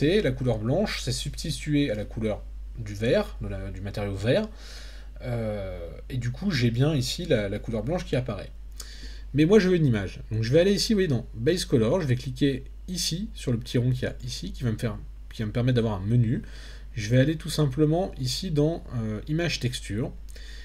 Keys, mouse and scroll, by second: 14.0-19.6 drag.